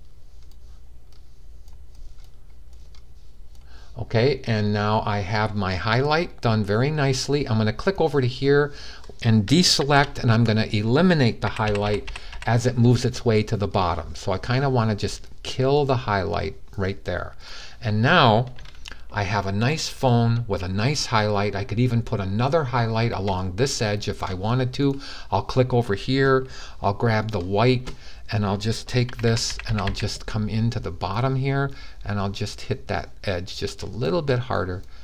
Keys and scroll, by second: 9.5 super+d, 11.2-12.0 typing, 29.6 [.